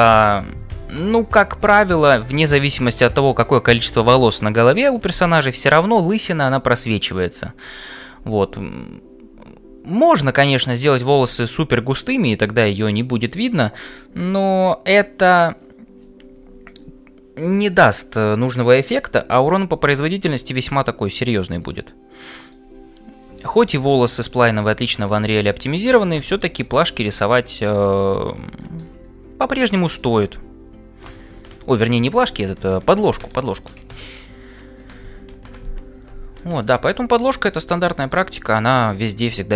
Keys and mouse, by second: 34.1 Tab.